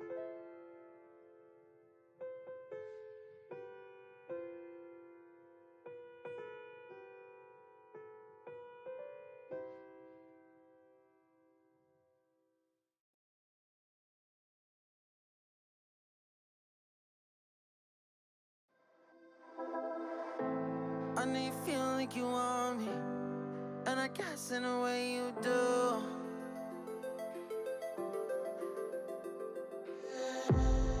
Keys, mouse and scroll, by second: 0.4 scroll up 3, 0.6-2.1 middle drag, 2.2 click, 2.6 Tab, 3.4 ctrl+z, 3.6 ctrl+z, 4.2 click, 4.4 Tab, 4.8 alt+click, 5.3 alt+shift+click, 5.9 alt+shift+click, 6.3 alt+shift+click, 7.7 s, 10.5 middle click, 11.1 click, 11.5 shift+click, 12.0 shift+click, 12.5 shift+click, 13.0 s, 14.4 click, 14.6 Tab, 14.7 click, 15.0-16.5 middle drag, 16.5 ctrl+z, 16.7 ctrl+z, 17.0 ctrl+z, 17.6 click, 17.8 middle click, 18.4 click, 19.3 shift+click, 19.7 shift+click, 19.9 shift+middle click, 20.4 s, 21.5 click, 21.7 scroll down 2, 21.9 click, 22.0 Tab, 22.1 click, 22.3 middle click, 22.7-23.1 scroll down 4, 23.1-24.3 middle drag, 24.3 click, 25.0-25.5 drag, 25.7 click, 25.9 middle drag, 26.1 scroll down 1, 26.2-26.8 shift+middle drag, 26.8 click, 27.0 Tab, 27.5 middle click, 27.6-28.0 scroll up 4, 28.0 click, 28.7 ctrl+l, 29.0 x, 29.6 scroll down 3, 29.8-31.0 middle drag.